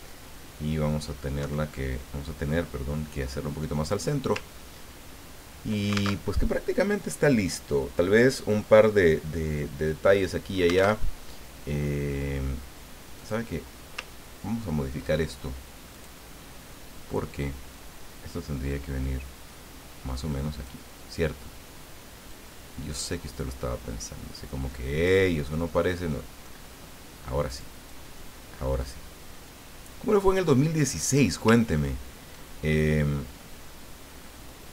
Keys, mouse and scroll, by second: 1.4 Right, 3.8 click, 4.6-5.2 ctrl+scroll down 4, 6.2 ctrl+alt+Tab, 11.0 alt+Tab, 13.1 click, 14.1-14.8 ctrl+scroll up 4, 15.9 click, 17.7-21.0 drag, 22.3-25.3 drag, 25.5-26.5 middle drag, 27.5 click, 27.9-31.4 drag, 31.7 ctrl+scroll down 2, 32.7 ctrl+middle click.